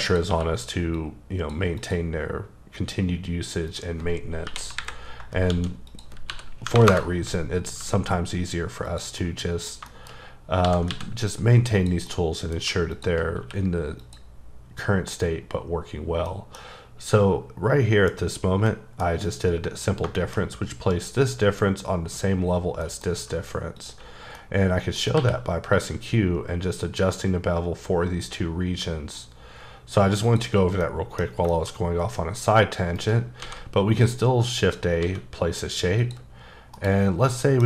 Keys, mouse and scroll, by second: 0.1 click, 0.3 q, 1.0 click, 1.8 click, 2.2-3.2 scroll down 2, 3.2-3.7 scroll up 1, 3.7 click, 4.5-7.8 typing, 5.9 click, 6.9 KP_Enter, 8.8 click, 9.2 middle click, 10.1-10.5 scroll up 2, 10.6 g, 10.9 x, 11.7 click, 12.1 middle click, 12.9 shift+click, 13.4 q, 14.0 click, 16.3 middle click, 18.7 middle click, 19.9-20.5 scroll down 4, 20.2 shift+middle click, 22.8 middle click, 23.1-23.7 scroll up 4, 23.8 click, 24.1 scroll down 1, 24.3 middle click, 25.2 q, 25.7 click, 30.3 click, 30.6 scroll down 1, 30.8 middle click, 31.7-32.5 scroll up 6, 33.0 shift+right click, 33.4 shift+a, 34.6 click, 35.0 s, 36.0 click, 36.8 KP_Decimal, 37.2 scroll down 3, 37.4 middle click.